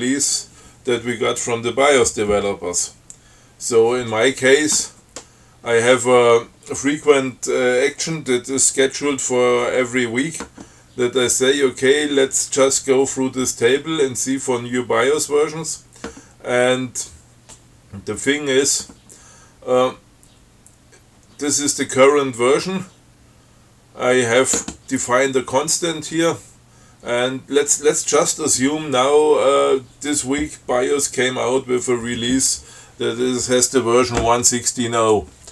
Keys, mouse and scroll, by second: 35.2 click.